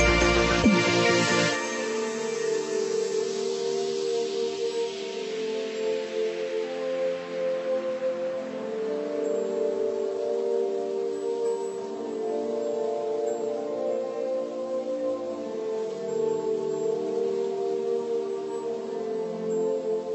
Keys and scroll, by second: 4.7 ctrl+=, 17.1 ctrl+-, 17.5 ctrl+0.